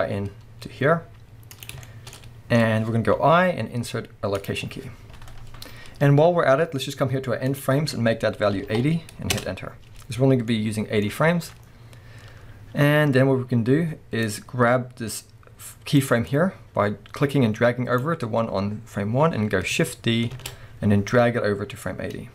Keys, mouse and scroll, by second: 1.8-7.5 shift+middle drag, 2.2-3.0 scroll up 2, 3.0 scroll up 1, 5.7-6.7 scroll down 2, 6.7-7.5 scroll down 1, 7.5-10.5 drag, 9.4 Return, 10.5-14.3 middle drag, 11.5-12.8 scroll down 2, 12.8-14.3 scroll up 2, 14.3-22.3 drag, 20.3 shift+d.